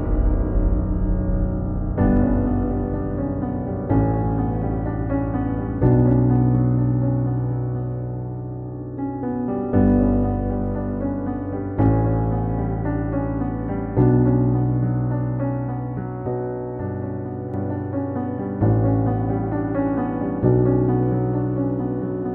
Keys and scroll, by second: 2.4 ctrl+0, 2.5 ctrl+s.